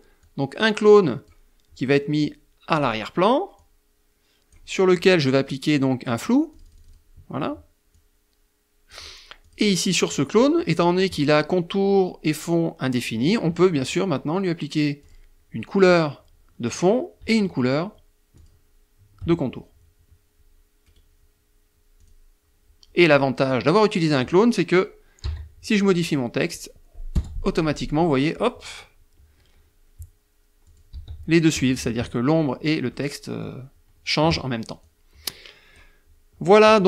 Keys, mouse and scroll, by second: 1.7 click, 2.5 click, 5.5 click, 6.9 click, 8.4 click, 13.9 click, 17.3 shift+click, 19.8 right click, 20.9 click, 22.1 middle click, 23.0 click, 24.1 t, 24.9 click, 26.0 BackSpace, 26.5 click, 29.5 click, 29.8 s, 30.5 F1, 31.8 click, 33.7 click, 35.4 click.